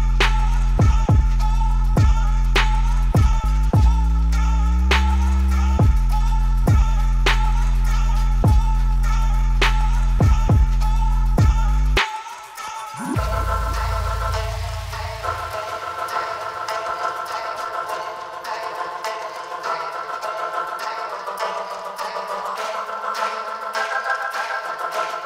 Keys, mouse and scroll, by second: 2.8 click, 4.8-6.1 drag, 6.1 KP_3, 7.9 F5, 8.6 click, 9.4 click, 10.4 click, 12.8 click, 14.4 click, 18.0-21.2 drag, 24.3-25.2 drag.